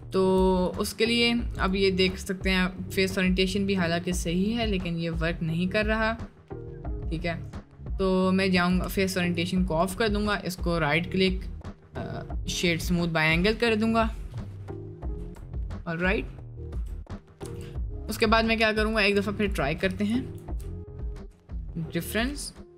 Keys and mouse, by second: 3.1 drag, 3.3 middle drag, 3.7 middle click, 4.5-6.9 middle drag, 13.5 middle drag, 15.1 Tab, 16.7 Tab, 17.4 Tab, 18.1 Tab, 20.3 ctrl+shift+b.